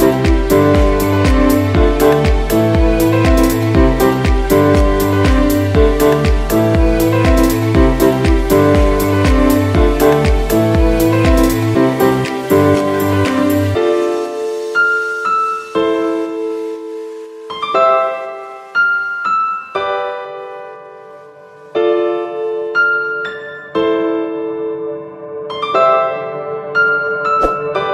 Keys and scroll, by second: 1.2 space, 1.8 ctrl+z, 2.4 ctrl+z, 3.7 space, 5.0 ctrl+-, 5.2 ctrl+z, 5.9 ctrl+-, 6.1 space, 9.0 space, 9.5 space, 10.3 space, 10.7 ctrl+z, 11.2 ctrl+space, 11.3 ctrl+space, 12.2 space, 12.9 space, 14.0 space, 15.1 space, 16.4 space, 17.1 ctrl+z, 17.4 ctrl+z, 17.7 space, 18.2 ctrl+z, 19.0 space, 20.1 space, 20.6 space, 22.2 space, 23.8 space, 24.5 space, 25.7 ctrl+z, 26.1 ctrl+z.